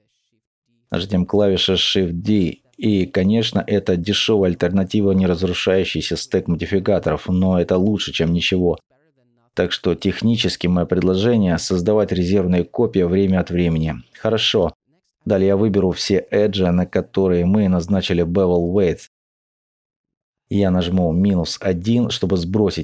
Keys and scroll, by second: 1.5 alt+shift+x, 2.7 g, 3.1 shift+d, 4.3-5.4 typing, 12.3 alt+shift+Tab, 16.1 shift+b, 16.8 ctrl+e, 17.7 b, 18.5 ctrl+e, 22.3 typing.